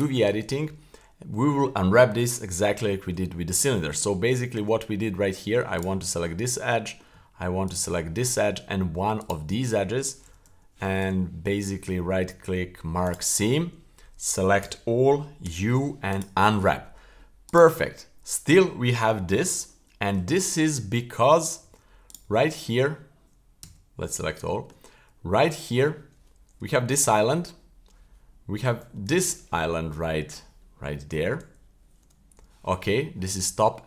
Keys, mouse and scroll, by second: 0.0 click, 2.7-3.1 shift+middle drag, 3.7 middle click, 4.2 Tab, 5.8 alt+right click, 6.7 middle click, 7.7 alt+shift+right click, 9.2 shift+right click, 10.2 q, 11.0 w, 14.6 a, 15.4 u, 17.5 right click, 17.9-18.5 scroll up 2, 20.4 a, 21.2-21.6 scroll up 1, 21.6 a, 22.1 right click, 22.2 a, 23.6 a, 24.2 scroll down 1, 24.5 shift+middle click, 24.9-25.4 scroll up 4, 25.4-25.7 scroll down 2, 26.6 l, 28.9 k, 29.5-31.9 scroll up 4, 32.0 l, 32.8-33.8 scroll down 3.